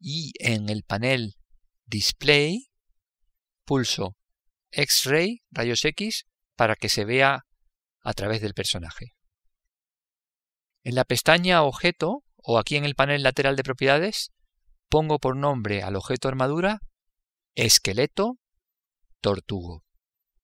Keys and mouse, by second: 5.4 click, 13.3 click.